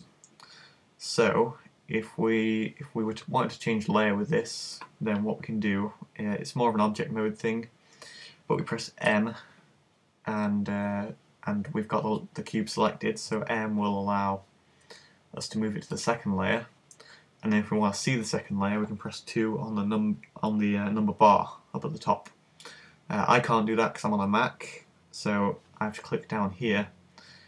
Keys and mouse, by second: 9.1 m, 13.2 m.